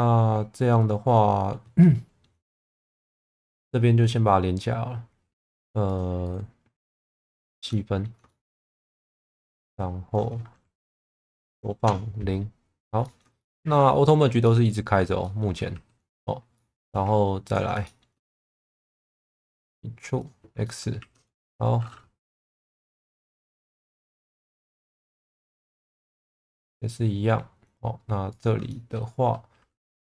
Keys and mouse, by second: 1.8 middle click, 2.8-4.4 middle drag, 5.3 2, 7.5 1, 7.7 middle click, 8.3 shift+middle click, 9.1 shift+middle click, 9.9 click, 11.2 s, 11.6 KP_0, 11.8 KP_Enter, 13.0 middle click, 13.4 shift+middle click, 14.4 middle click, 15.2 middle click, 15.7 2, 16.0 click, 16.5 middle click, 17.4 ctrl+click, 17.8 shift+middle click, 18.7 e, 19.3 x, 20.1 click, 20.6 middle click, 21.0 1, 22.2 h, 23.2 ctrl+z, 24.5 g, 24.7 b, 25.0 click, 25.9 click, 26.6 middle click, 28.7 shift+middle click.